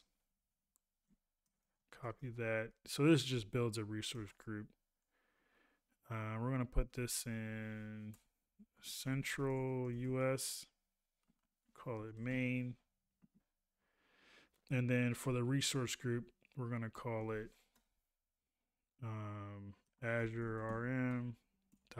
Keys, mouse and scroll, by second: 0.1 ctrl+a.